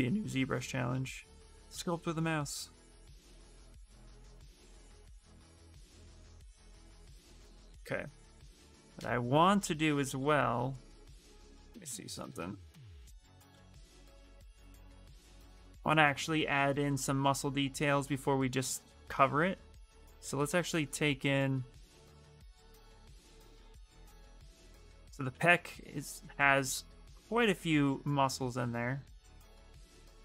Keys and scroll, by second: 5.5 ctrl+z, 5.7 ctrl+z, 6.4 ctrl+z, 9.6-10.3 typing, 15.8-17.0 typing, 18.0 s, 24.5 ctrl+z, 24.9 ctrl+z, 27.5 ctrl+z, 28.1 space.